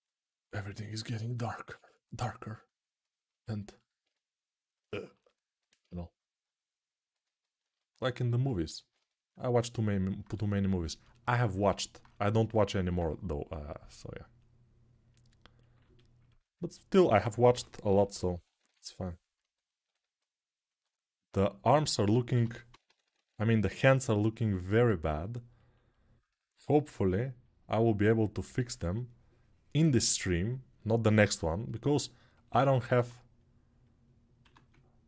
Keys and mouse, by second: 8.5 ctrl+z, 17.2-18.4 typing, 17.8-22.9 right drag, 22.1-23.1 typing, 26.0-35.0 ctrl+alt+drag, 34.2 1.